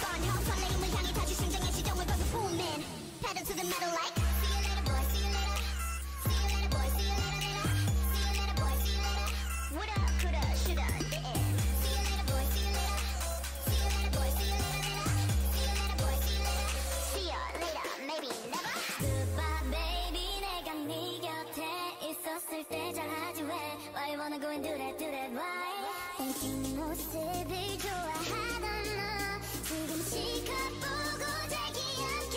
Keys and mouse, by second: 5.0 middle click, 6.6 ctrl+Tab, 7.4 ctrl+Tab, 8.3-10.6 drag, 8.9 ctrl+Tab, 9.7 x, 10.1 x, 11.6 ctrl+Tab, 12.8 s, 14.6 g, 19.0 ctrl+r, 19.3 g, 21.8 right click, 23.6 a, 23.7 a, 24.0 s, 26.0 s, 28.8 e, 30.7 e, 31.4 g.